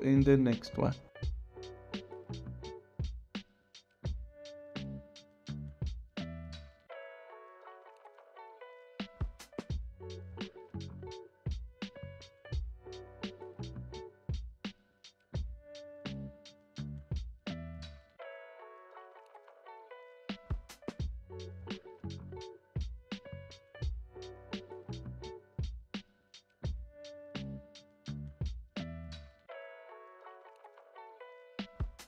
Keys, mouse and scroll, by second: 0.3 space.